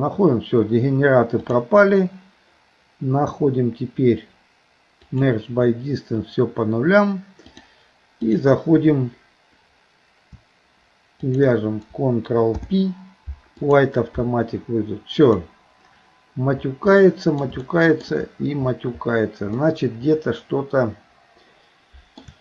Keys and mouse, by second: 1.5-5.4 drag, 7.6 click, 11.2 shift+click, 12.5 ctrl+p, 17.0 middle click, 17.7 shift+middle click, 19.6-22.2 middle drag.